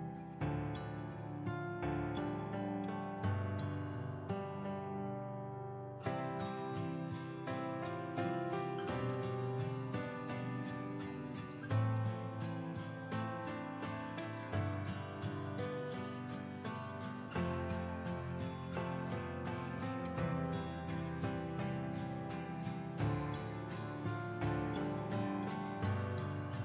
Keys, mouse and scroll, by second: 0.1 click, 1.3 End, 2.1 Return, 2.5 ctrl+v, 2.7 ctrl+v, 3.9 ctrl+space, 4.0 ctrl+space, 4.9-13.2 drag, 13.2 scroll down 1, 13.7-14.0 scroll up 1, 14.0 click, 15.2-15.7 scroll up 1, 15.7 click, 17.1 click, 18.6 click, 18.8 ctrl+a, 19.3 KP_1, 20.8 scroll down 1, 21.0 click, 22.6 shift+click, 23.7 click, 24.5 scroll up 1, 25.6-26.6 drag.